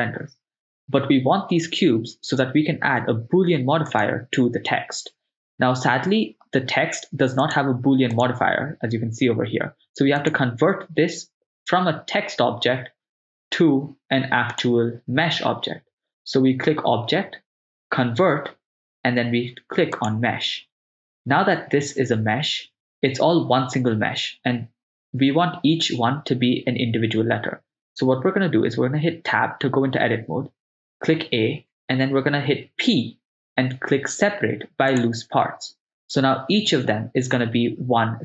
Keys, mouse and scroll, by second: 4.1 right click, 7.4 click, 8.2-10.3 drag, 14.6-20.7 drag, 29.3 Tab, 30.9 a, 32.7 p.